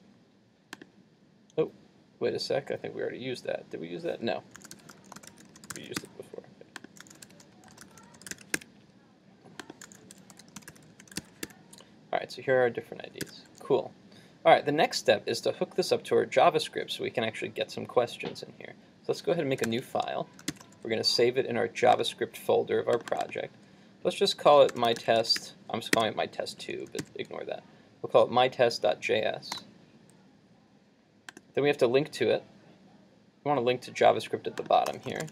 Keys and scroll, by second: 13.3 super+s, 19.7 super+n, 20.5 shift+super+s.